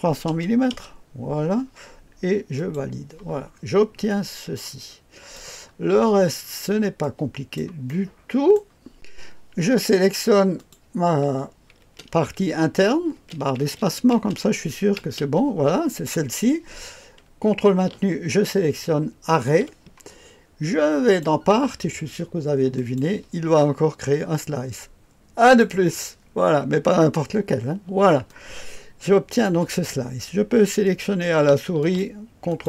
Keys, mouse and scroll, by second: 0.3 KP_0, 0.7 KP_0, 2.5 click, 3.5-4.0 scroll down 1, 4.1-5.7 drag, 5.9-6.4 scroll down 1, 6.4-7.0 scroll up 1, 7.0-7.6 drag, 10.6 click, 11.1 click, 11.8-14.9 typing, 19.3 ctrl+click, 21.0 click, 22.7 click, 25.4 click, 28.3-29.5 drag, 30.8 click, 31.8-32.6 ctrl+drag.